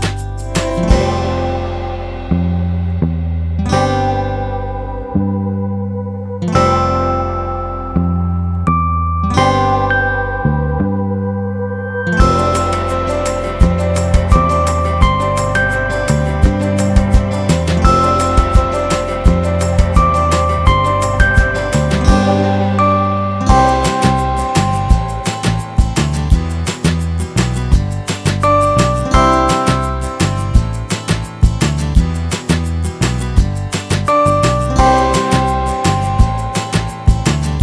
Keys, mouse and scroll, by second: 3.0 s, 8.0 a, 9.9-11.5 drag, 13.3 s, 18.5 a.